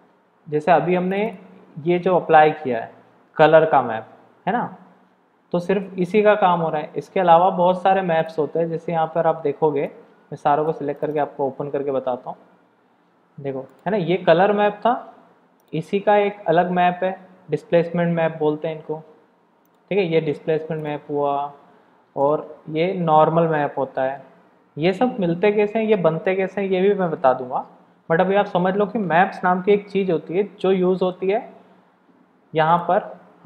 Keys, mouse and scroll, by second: 19.6 click.